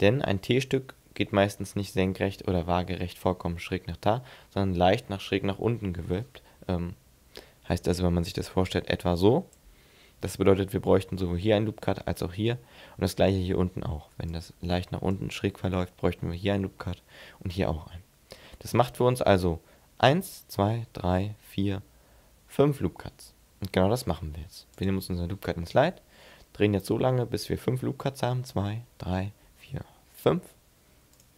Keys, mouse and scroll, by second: 7.7-8.3 d, 8.3 click, 9.6 d, 9.7 d, 14.0 d, 14.3 click, 15.2 d, 24.7 click.